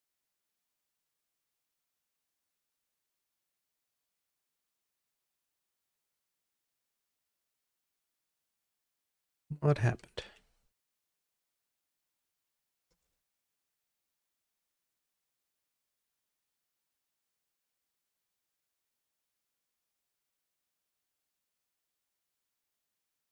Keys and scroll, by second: 9.0 super+z, 13.6 super+z, 20.2 super+z, 21.0 super+z.